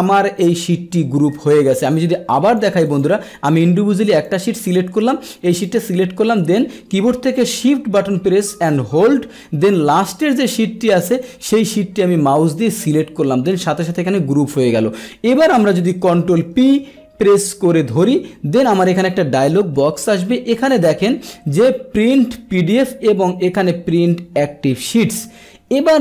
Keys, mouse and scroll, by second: 1.7 click, 2.5 click, 2.9 click, 3.5 click, 4.3 click, 5.6 click, 11.1 shift+click, 16.5 ctrl+p.